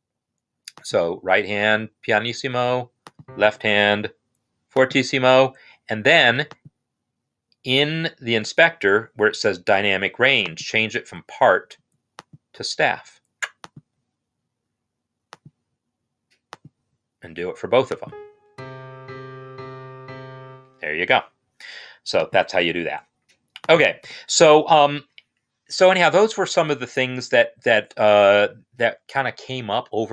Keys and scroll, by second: 18.5 space, 21.1 space, 22.6 BackSpace, 23.9 BackSpace.